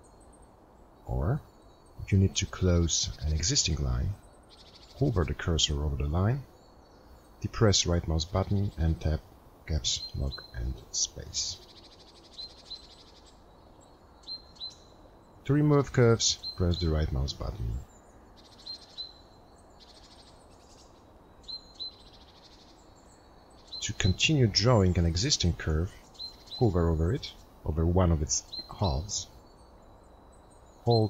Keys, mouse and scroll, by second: 11.1 right click, 18.6 right click.